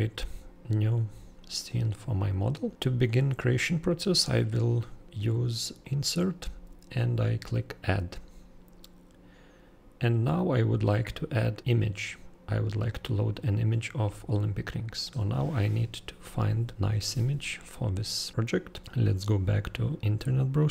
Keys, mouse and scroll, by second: 0.7 super+scroll down 4, 1.6-2.7 super+scroll up 4, 3.1 super+scroll, 5.8 super+click, 7.6 super+click.